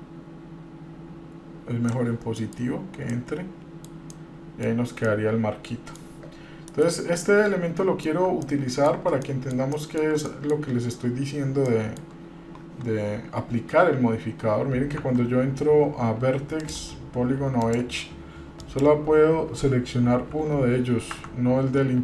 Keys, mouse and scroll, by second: 2.5-2.9 middle drag, 2.7-3.1 scroll up 2, 3.3-4.2 middle drag, 4.3-4.9 middle drag, 5.1 scroll down 1, 5.2-6.1 middle drag, 6.9 KP_Divide, 7.4-8.3 middle drag, 8.6-9.1 middle drag, 9.4 middle click, 9.9 shift+middle drag, 10.5 middle click, 11.0 scroll up 1, 11.9-12.2 shift+middle drag, 14.7 scroll up 1, 15.2 Tab, 16.8 click, 17.8 click, 18.8 click, 20.4 g.